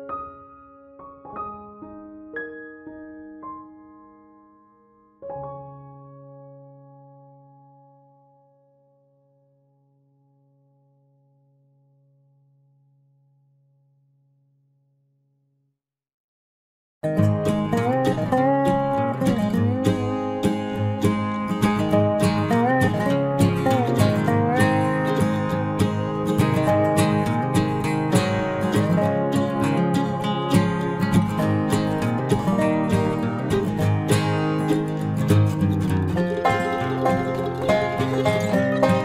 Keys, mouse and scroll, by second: 4.3 c, 6.4-7.6 right drag, 6.6 c, 7.6 click, 11.0 right click, 11.6 c, 16.9-18.8 right drag, 17.9 c, 21.3-22.5 middle drag, 22.5-24.3 drag, 22.8 c, 34.3-36.0 right drag, 36.7 c, 38.8 right click.